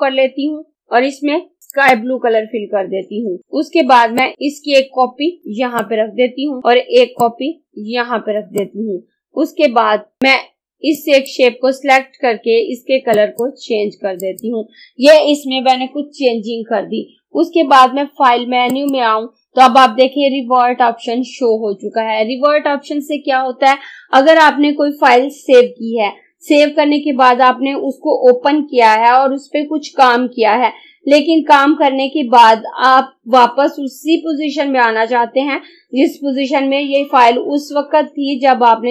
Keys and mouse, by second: 1.7 click, 4.3-5.4 drag, 5.4 right click, 7.3 click, 8.4 right click, 10.2-13.2 drag, 18.7 click.